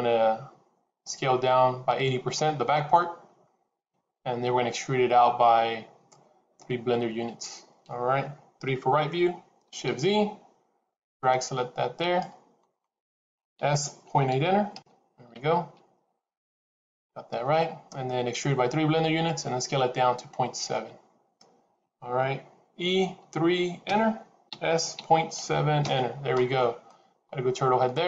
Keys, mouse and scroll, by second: 8.5 KP_3, 10.2 shift+z, 11.0 click, 13.5 s, 22.7 e, 24.4 s, 26.8 middle click.